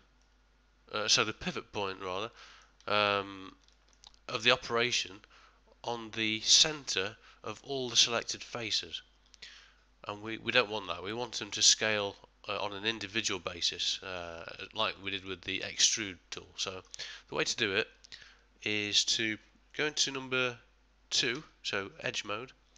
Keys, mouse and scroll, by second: 0.2 middle click, 1.1 middle click, 1.9 middle click, 2.4 ctrl+middle click, 2.9 shift+middle click, 3.7 ctrl+middle click, 10.6 middle click, 11.1 middle click, 11.3 shift+middle click, 11.7 ctrl+middle click, 13.9 middle click, 14.6 ctrl+middle click, 15.0 shift+middle click, 15.6 middle click, 16.1 shift+middle click, 16.6 middle click, 18.3 middle click, 21.3 2, 22.2 middle click.